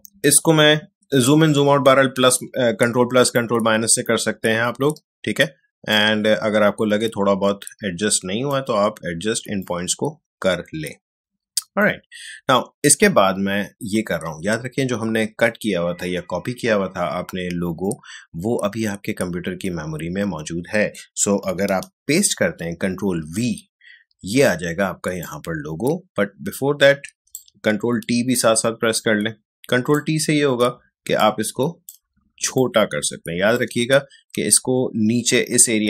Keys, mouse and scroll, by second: 3.0 space, 3.3 click, 3.5 space, 5.9-14.4 drag, 23.1 ctrl+v, 25.2-27.7 drag, 27.7 ctrl+t, 28.9-35.8 drag.